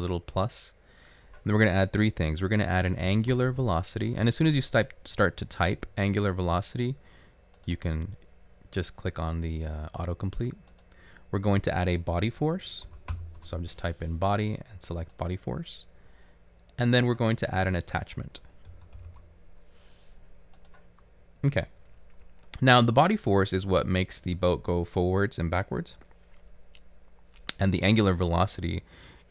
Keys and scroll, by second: 2.8-4.1 typing, 12.7-14.0 typing, 18.6-19.3 typing.